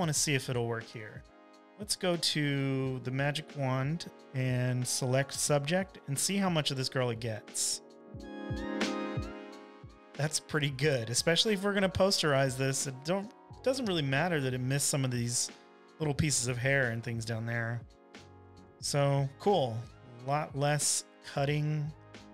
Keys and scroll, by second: 0.0-0.2 typing, 3.3 w, 19.4 super+j, 21.2 v.